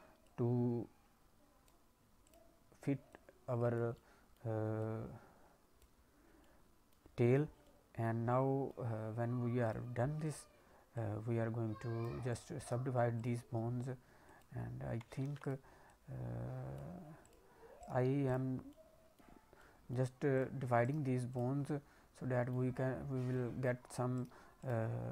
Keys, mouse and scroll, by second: 0.2 click, 2.2 click, 3.0 click, 3.9 middle click, 4.8 click, 6.4 middle click, 7.6 middle click, 8.2 middle click, 9.6 click, 10.2 click, 10.9 click, 12.2 click, 12.6 right click, 13.6-14.2 scroll up 1, 14.2 click, 15.2 ctrl+z, 15.3 click, 15.8 click, 17.2 click, 17.8 right click, 18.6 middle click, 19.3 scroll down 1, 19.5 middle click, 20.3 click, 20.8 right click, 21.5 scroll down 1, 21.6 middle click, 22.7-23.3 scroll down 1, 23.3 middle click, 24.2 right click.